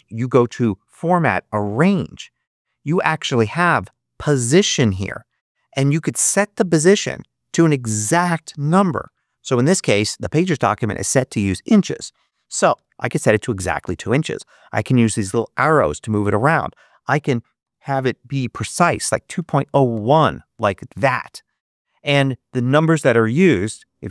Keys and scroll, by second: 8.9 2, 12.6 Return, 17.9 0, 19.3 1, 19.8 Return.